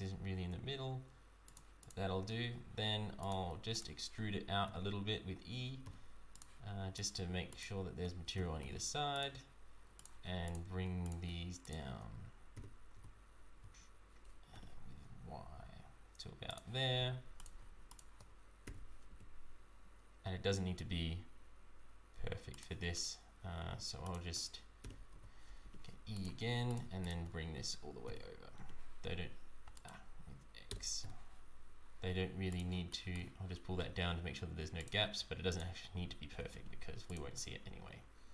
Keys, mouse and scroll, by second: 1.8 click, 2.2 Tab, 3.2 click, 3.7 shift+click, 4.6 e, 6.9 click, 7.5 shift+click, 8.3 e, 9.9 shift+click, 10.5 shift+click, 11.0 click, 11.6 shift+click, 12.5 e, 17.3 click, 17.9 shift+click, 18.6 e, 22.9 click, 24.0 shift+click, 24.8 e, 26.6 click, 27.0 shift+click, 28.0 e, 32.9 shift+middle click, 34.7 click, 35.4 shift+click, 36.2 g, 37.3 Tab, 37.8-38.3 scroll down 4.